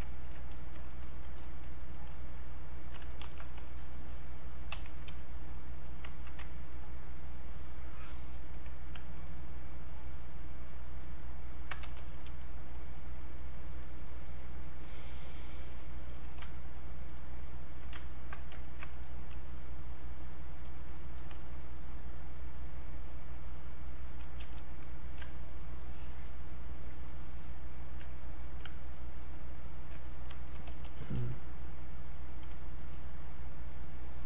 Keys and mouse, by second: 0.1 ctrl+right click, 0.5 click, 2.1 alt+click, 3.2 ctrl+shift+1, 3.6-6.7 shift+drag, 6.7-9.3 ctrl+drag, 12.0 e, 13.5 click, 17.0-20.2 drag, 20.2 click, 21.2 click, 22.5-24.4 drag, 24.4 q, 25.6-28.9 ctrl+drag, 30.9 e, 31.1-32.8 drag, 32.8-34.2 alt+drag.